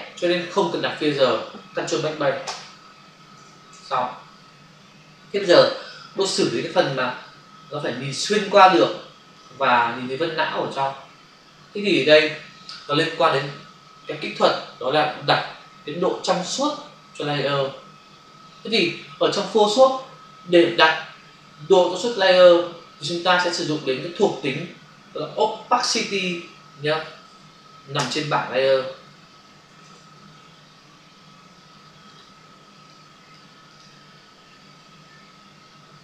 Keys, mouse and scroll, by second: 2.4 ctrl+BackSpace, 3.4 ctrl+d, 4.7 ctrl+v, 6.8 space, 7.2 ctrl+click, 9.7 click, 26.2 Print, 27.3 ctrl+n, 28.0 Return, 30.3 ctrl+f, 32.0 click, 32.1 click, 32.9 click, 33.6 click, 33.8 click, 34.8 b.